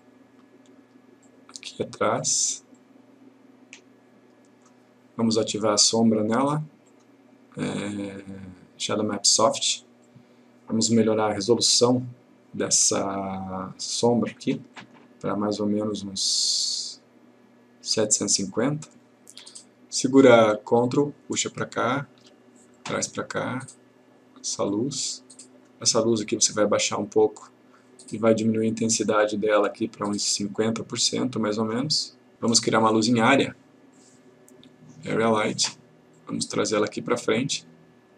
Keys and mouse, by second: 10.1 click, 11.9 click, 13.9 click, 18.6 click, 21.0 ctrl+click, 34.0-35.3 click.